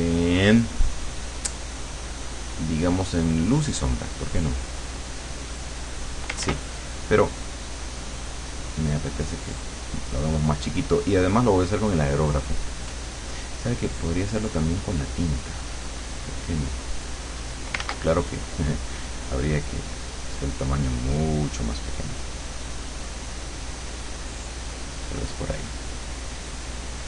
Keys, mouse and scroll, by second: 3.6 click, 5.4 click, 6.5 ctrl+z, 8.0-9.7 drag, 11.4 click, 14.4 click, 17.0 click, 17.8 ctrl+z, 20.4-25.2 drag, 26.4 click.